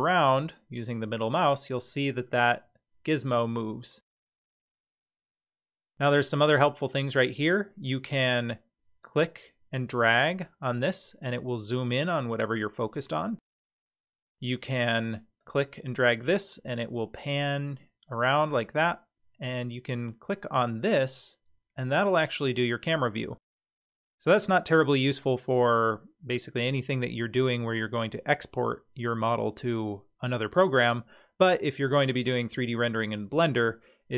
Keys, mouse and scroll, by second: 3.3-5.8 middle drag, 9.0-13.7 drag, 15.4-18.4 drag, 20.8 click.